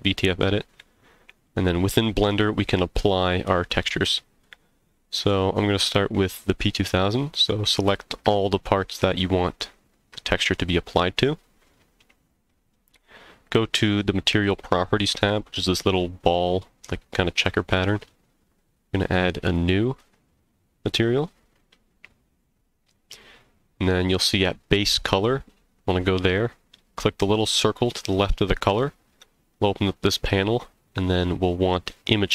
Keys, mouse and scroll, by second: 1.9-2.7 middle drag, 4.4-5.6 scroll down 9, 7.2 click, 8.4 shift+click, 9.5 shift+click, 16.2 click, 19.4 click, 27.7 click.